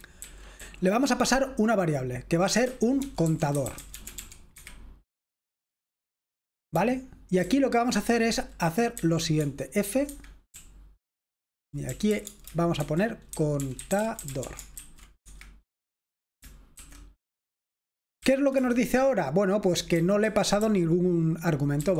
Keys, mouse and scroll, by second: 0.0-0.5 typing, 2.4-4.1 typing, 6.8-15.2 typing, 10.0 Escape, 15.2 Escape, 16.8 shift+;, 18.4 w, 18.5 Return, 20.1-21.9 typing.